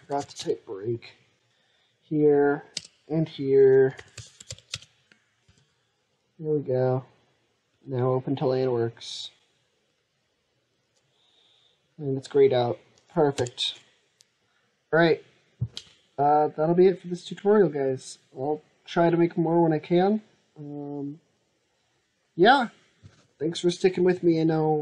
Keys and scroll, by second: 5.3 ctrl+s.